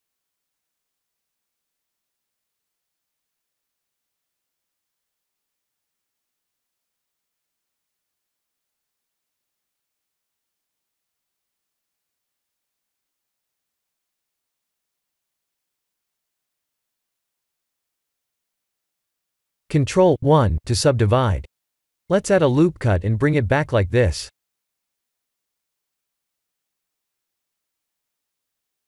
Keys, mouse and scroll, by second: 0.7 g, 2.7 s, 4.3 g, 5.9 e, 8.9 s, 10.6 e, 12.7 Tab, 13.1 middle click, 13.8 shift+z, 14.1 middle click, 16.9-17.3 scroll down 3, 17.3 middle click, 18.6 middle click, 20.3 ctrl+1, 21.1 middle click, 23.2 scroll up 2, 23.6 shift+middle click, 24.4 click, 24.8 Tab, 25.3 Tab, 25.8 click, 26.2 Tab, 26.8 ctrl+r.